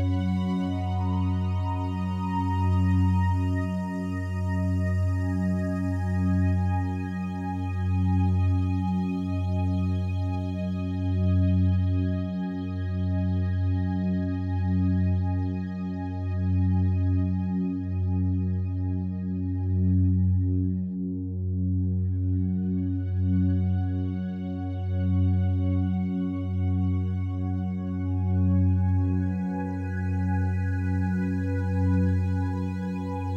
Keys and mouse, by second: 2.5 click, 2.7 click, 3.8 typing, 5.7 click, 6.0-9.1 alt+drag, 8.0 typing, 9.8 click, 12.0 click, 12.5 shift+click, 13.5 typing, 14.8 click, 15.2-16.9 alt+drag, 17.5-18.7 alt+drag, 19.0 alt+shift+click, 20.7 click, 23.0 click, 24.1 click, 25.3 click, 26.5 click, 26.5 typing, 27.8-33.2 drag.